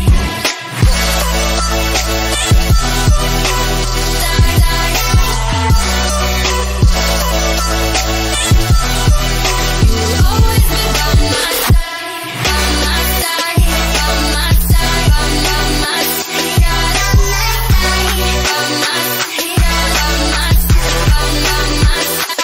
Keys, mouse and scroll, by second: 0.6-1.8 scroll down 1, 3.9 scroll up 1, 5.8 ctrl+alt+shift+e, 9.1 click, 18.5-21.5 drag, 21.8-22.4 drag.